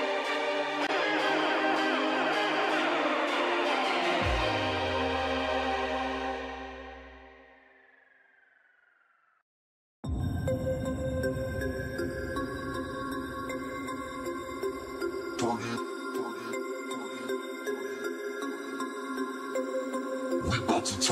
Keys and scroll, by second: 0.3 ctrl+shift+space, 2.7 ctrl+shift+space, 6.9 ctrl+shift+space, 11.3 space.